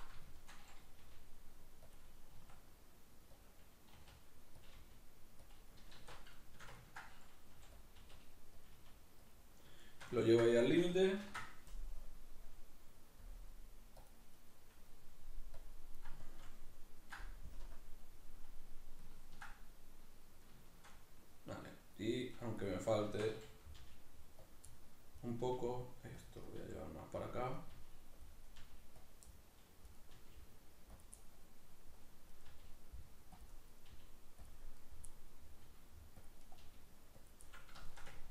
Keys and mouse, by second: 0.3 shift+middle click, 1.0 g, 2.0 click, 2.3 s, 3.5 click, 4.0 r, 4.7 click, 4.8 g, 5.6 click, 6.0 alt+q, 6.4-7.9 shift+middle drag, 7.5 g, 7.9 click, 8.0 r, 8.7 click, 8.8 g, 9.4 click, 9.8-14.5 shift+middle drag, 11.2 ctrl+r, 14.5 right click, 15.6 click, 16.2-22.3 shift+middle drag, 17.6 KP_Decimal, 22.3 right click, 23.1 shift+Tab, 23.7 g, 24.5 click, 24.7 middle click, 25.2 right click, 25.4 g, 26.3 click, 26.5 right click, 26.6 g, 27.3 click, 27.6 right click, 27.8 g, 28.3 click, 28.5 right click, 28.6 g, 29.1 click, 29.3 middle click, 29.9 right click, 30.2 g, 31.0 click, 31.2-32.4 middle drag, 32.4 right click, 32.5 g, 33.4 click, 33.7 right click, 33.9 g, 34.5 click, 34.8 right click, 35.1-36.3 middle drag, 35.6 g, 36.3 click, 36.4 right click, 36.6 g, 37.3 click, 37.5-38.3 middle drag.